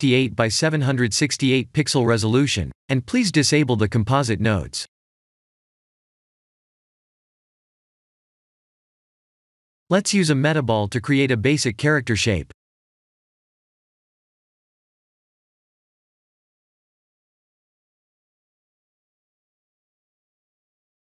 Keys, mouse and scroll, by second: 5.5 click, 9.7 click, 10.8 shift+a, 17.1 g.